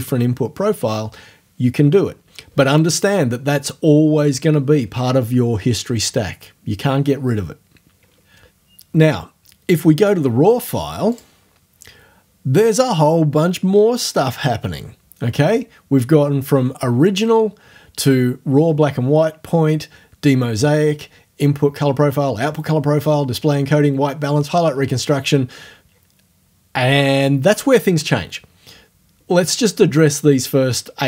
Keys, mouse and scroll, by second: 11.1 click.